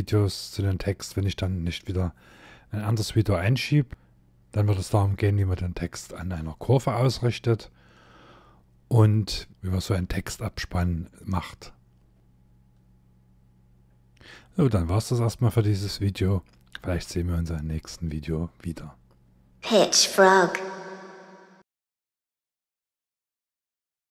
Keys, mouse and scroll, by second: 9.5 shift+middle click, 9.5 scroll down 3, 9.7 scroll up 2, 14.9-15.2 scroll up 1.